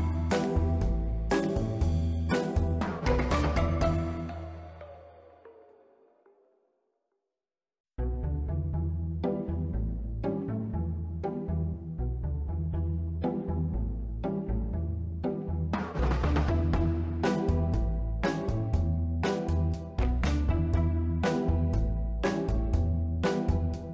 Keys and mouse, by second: 1.1 click, 1.9 click, 3.4 click, 5.8 click, 6.9 middle click, 7.8-9.0 drag, 9.5 middle click, 10.1 ctrl+middle click, 10.6 Tab, 10.8 click, 11.1 b, 12.4 s, 12.5 x, 14.4 click, 15.2 click, 16.4 s, 17.4 click, 17.9 middle click, 19.2-20.9 middle drag, 21.6 Tab, 23.8 drag.